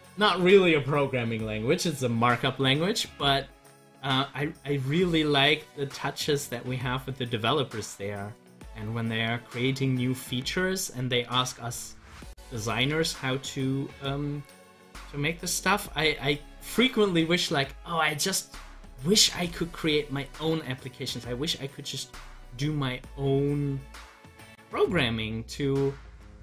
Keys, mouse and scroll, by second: 6.7 click, 14.7 click.